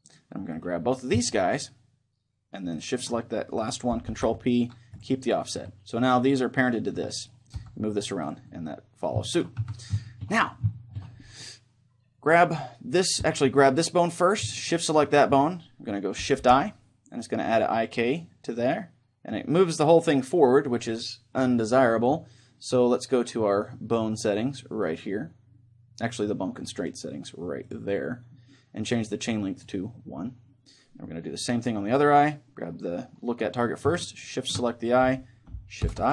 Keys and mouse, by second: 0.2-1.9 drag, 0.6-4.6 right drag, 4.1 ctrl+p, 6.7 a, 7.0 Tab, 7.2-8.5 right drag, 7.6 g, 8.5-12.3 middle drag, 9.8 z, 12.3-16.4 right drag, 16.4 shift+i, 24.8-26.7 drag, 27.6-29.4 drag, 29.6-31.4 drag, 31.4-33.2 right drag, 34.3-36.1 right drag, 35.8 shift+i.